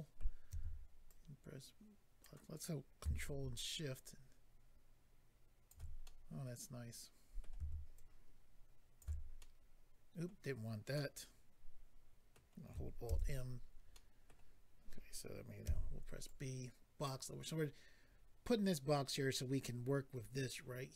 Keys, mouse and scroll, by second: 0.5 b, 1.1 click, 6.0 middle click, 7.9 ctrl+click, 9.4 middle click, 10.9 middle click, 13.0 alt+m, 13.5-13.9 scroll down 2, 13.9 middle click, 15.6 b, 16.2 click.